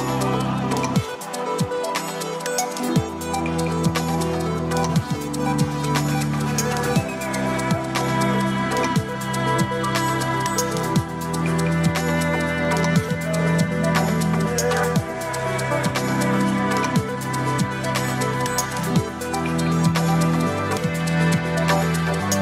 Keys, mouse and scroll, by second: 2.1 click, 3.2-6.4 drag, 7.6-8.6 drag, 10.7 click, 13.8-15.5 drag, 16.8 click, 18.8-20.6 drag, 20.7 KP_1, 21.0-22.4 drag.